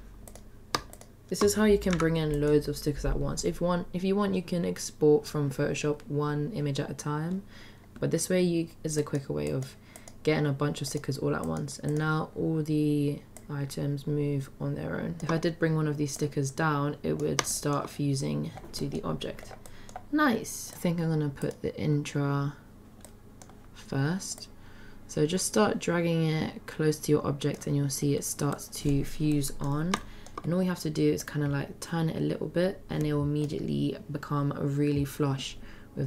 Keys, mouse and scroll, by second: 0.3 click, 1.9 click, 8.9-9.7 drag, 9.9 drag, 10.8 drag, 11.4 click, 11.8 click, 13.4-15.2 drag, 15.2 shift+middle click, 16.2-17.3 drag, 17.5 shift+middle drag, 18.8 middle click, 19.7-20.0 middle drag, 23.0-23.5 middle drag, 24.4-27.7 drag, 27.8-28.1 middle drag, 28.5-28.9 middle drag, 29.3-29.7 middle drag, 30.0-30.3 shift+middle drag, 31.2-33.5 drag.